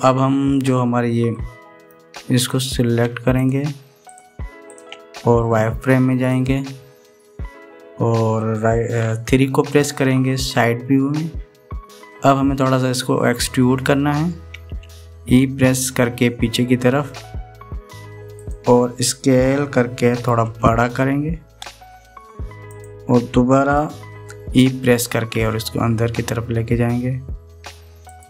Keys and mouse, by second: 2.3 middle click, 3.3 click, 4.1 shift+click, 4.8 shift+click, 5.4 shift+click, 7.1 click, 10.6 KP_3, 17.1 e, 21.2 s, 26.2 e.